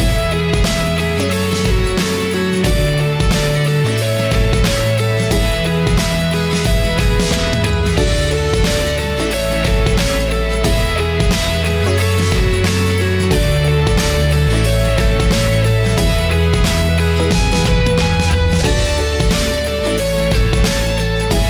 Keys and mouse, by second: 1.0-2.1 middle drag, 2.2 middle click, 2.4-3.7 middle drag, 4.6 middle click, 9.5-10.5 middle drag, 12.6-14.6 middle drag, 15.5 middle click, 16.5 middle click, 16.8 click, 17.1 middle click, 18.6-19.9 middle drag, 21.3 middle click.